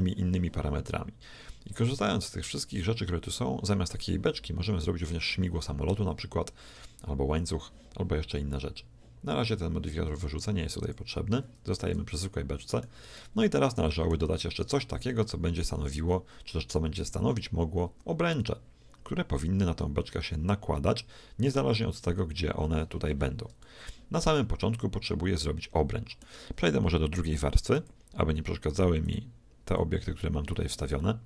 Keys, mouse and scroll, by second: 10.9-12.7 drag, 11.9-15.1 middle drag, 15.1 scroll down 1, 15.3-17.2 middle drag, 24.4-26.4 middle drag, 27.8-31.2 drag, 31.0-31.2 shift+middle drag.